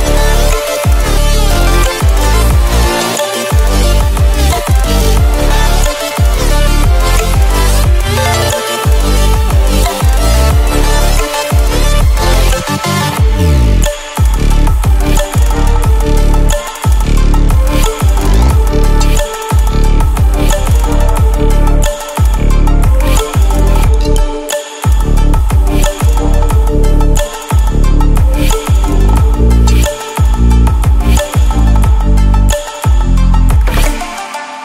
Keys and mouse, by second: 1.7-6.3 drag, 4.2-6.3 drag, 7.5 ], 7.8 ], 7.9 ], 8.7 click, 10.3-11.4 typing, 12.4 [, 12.8 right click, 13.8-20.4 drag, 22.3 [, 23.2 click, 25.7 right click, 27.0-31.1 drag, 32.5 right click, 33.5-34.6 drag.